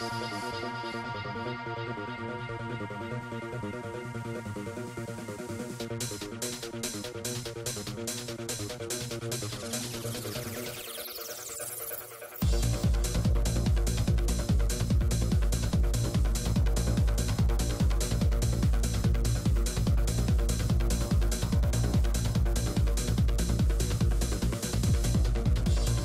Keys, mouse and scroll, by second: 1.0 right click, 1.4 click, 1.4 right click, 2.5 shift+c, 2.6 f, 3.6 click, 5.1 click, 6.1-8.3 drag, 8.3 ctrl+z, 8.7-10.2 drag, 10.2 middle click, 10.6 right click, 10.9 shift+f, 11.6 click, 12.5 middle click, 12.9 click, 12.9 right click, 13.8-16.1 middle drag, 16.1 click, 16.2 f, 16.5 right click, 16.7 f, 16.9 middle click, 17.5-18.6 drag, 18.6 f, 19.0 click, 20.2 p, 20.6 click, 23.5-25.2 typing, 25.6 click.